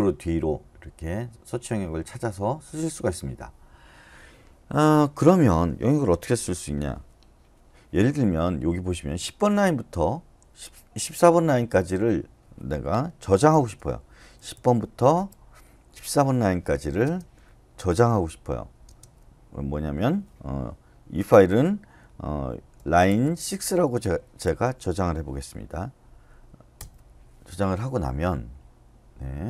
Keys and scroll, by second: 13.3-18.9 typing, 22.5-25.2 typing, 26.7 Return.